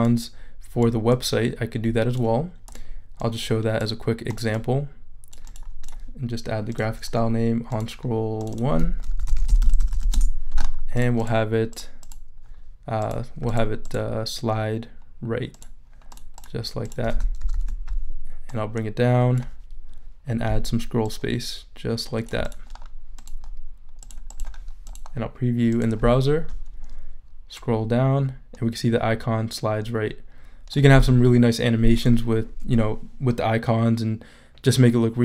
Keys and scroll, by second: 9.0-10.3 typing, 17.4 super+-.